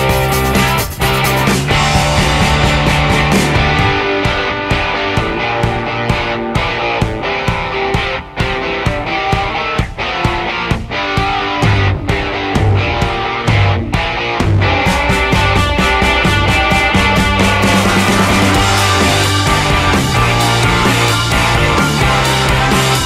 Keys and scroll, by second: 1.8 ctrl+z, 3.3 e, 7.9 Delete, 15.6 r, 18.0 ctrl+z, 19.6 e.